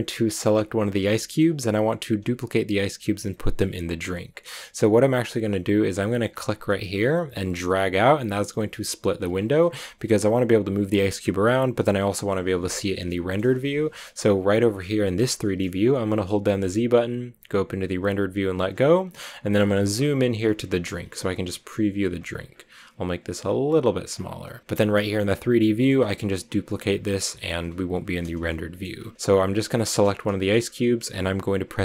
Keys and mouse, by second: 1.0 shift+middle drag, 8.2-10.5 drag, 12.9 shift+click, 17.2 z, 19.4 shift+drag, 20.3 shift+middle click, 22.1 click, 23.5 click, 24.6 click, 25.0-25.8 drag, 27.1-27.4 drag, 28.6 drag.